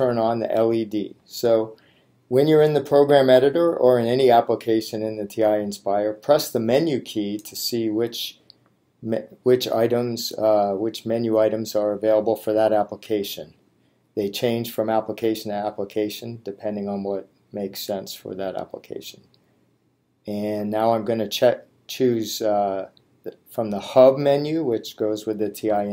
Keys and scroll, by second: 7.2 Menu, 23.5 Down.